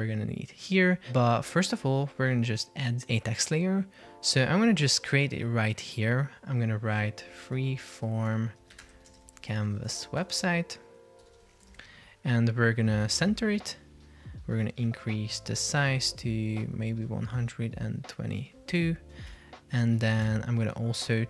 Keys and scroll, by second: 7.3 shift+f, 8.3 BackSpace, 19.1 Return, 19.4 Escape.